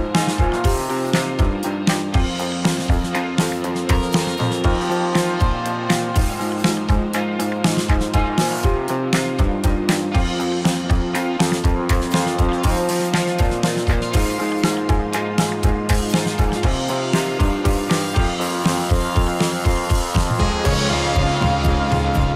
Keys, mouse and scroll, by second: 0.4 r, 0.6 x, 1.4 y, 1.9 z, 2.9 click, 3.2 g, 3.5 z, 3.8 x, 4.4 y, 6.6-8.6 drag, 15.3 click, 16.1 click, 16.6 KP_0, 18.2 click, 19.8 click.